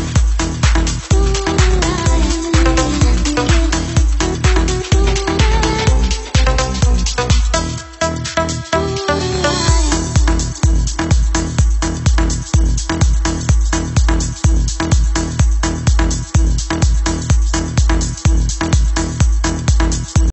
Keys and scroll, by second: 1.7-2.1 Down, 2.4 Down, 2.9 Down, 8.7-10.9 Down, 11.3 Up, 11.6 Up, 14.0 Up, 14.3-15.4 Up.